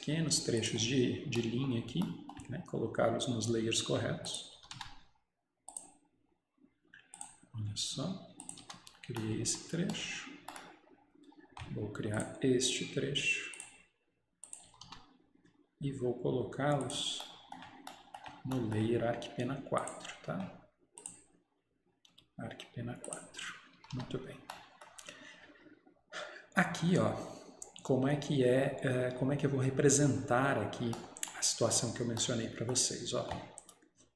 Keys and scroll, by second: 4.8 Escape, 8.7 Escape, 14.7 Escape, 14.9 Escape, 23.8 Escape, 24.0 Escape.